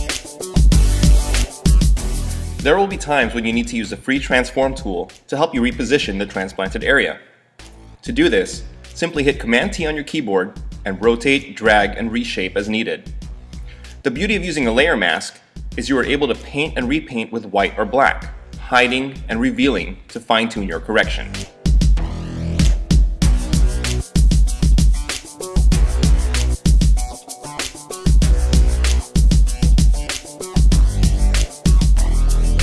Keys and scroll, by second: 3.6 v, 7.8 Up, 9.7 super+t, 12.5 Down, 15.1 Page_Up, 15.7 super+=, 15.8 space, 16.7 [, 26.2 x, 26.9 [, 32.0 x.